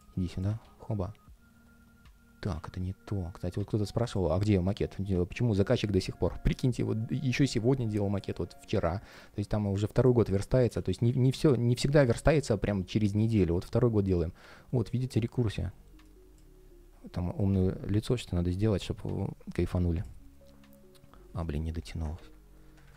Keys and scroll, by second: 0.3 super+v, 2.2 super+x, 10.8 super+v, 22.6 super+\.